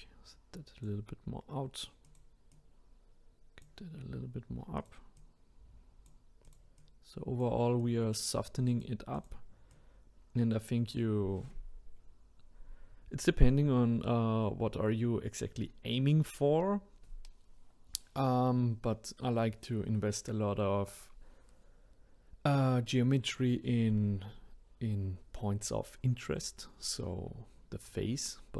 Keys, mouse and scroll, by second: 2.5-4.9 drag, 5.2-6.5 drag, 6.8 click, 7.8 click, 9.1 click, 9.7 click.